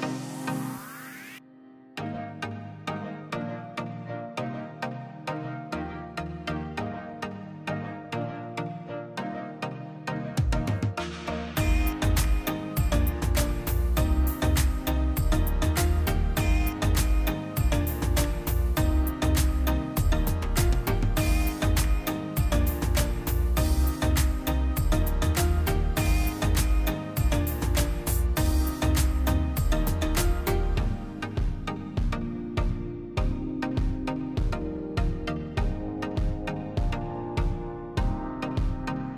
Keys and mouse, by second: 0.0 3, 0.2 click, 2.6 middle click, 2.8 drag, 3.2 shift+click, 3.6 middle click, 3.9 shift+click, 4.3 middle click, 4.6 shift+click, 4.9 middle click, 5.1 shift+click, 8.3 shift+click, 9.0 shift+click, 10.0 shift+click, 10.8 click, 11.0-13.9 middle drag, 13.9-15.0 drag, 15.0 shift+z, 15.6 middle click, 15.8 click, 16.1 shift+middle click, 16.8 space, 17.4-18.9 drag, 19.0 middle click, 19.7 shift+z, 20.0-21.0 middle drag, 21.0 click, 21.9 middle click, 22.5 Tab, 22.8 middle click, 23.3 click, 23.6-25.1 middle drag, 25.5 z, 25.8 z, 26.1-27.0 middle drag, 27.0 click, 27.8-30.5 middle drag, 30.5 Tab, 30.8-32.3 middle drag, 33.2 click, 33.7 click, 34.6-36.7 middle drag, 36.7 click, 37.0 alt+click, 37.5-39.1 middle drag.